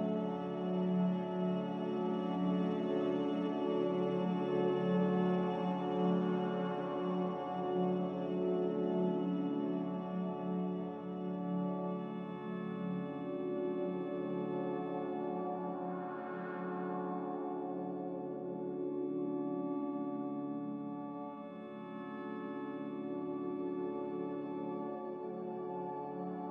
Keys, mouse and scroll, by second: 5.1 Delete, 6.2 Delete, 8.8 Delete, 9.8 Delete, 22.5 a, 23.5 ctrl+c, 24.0 ctrl+z, 24.4 ctrl+z.